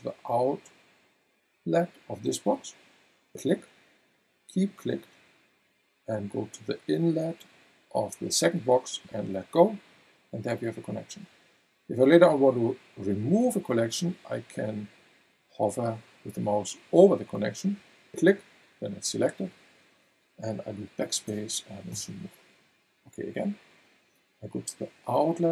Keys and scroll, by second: 21.2 BackSpace.